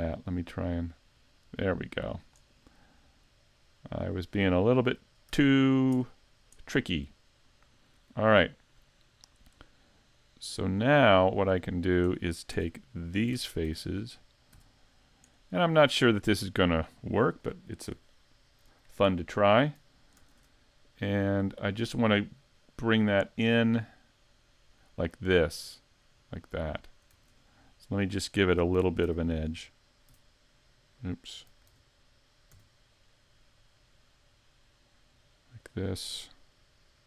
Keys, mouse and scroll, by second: 0.8 click, 2.7 middle click, 5.3 a, 6.0 Tab, 6.3 scroll down 2, 6.6 middle click, 7.8 middle click, 10.2 click, 12.6 Tab, 13.4 ctrl+Tab, 14.5 c, 16.4 middle click, 28.0 middle click, 29.1 e, 29.4 click, 30.1 e, 35.7 click.